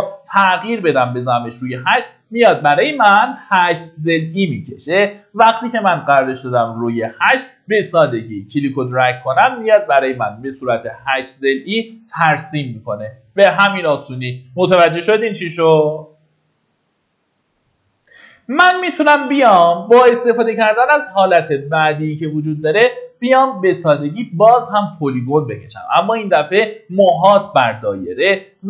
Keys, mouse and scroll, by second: 0.6 KP_8, 6.2 middle click, 7.3-8.5 drag.